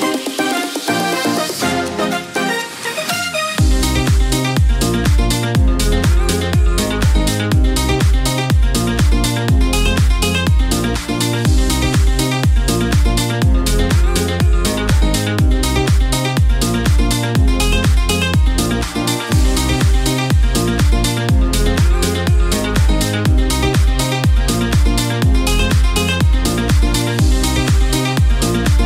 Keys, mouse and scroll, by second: 0.8 u, 7.2 alt+], 19.5 ctrl+v, 22.2 u.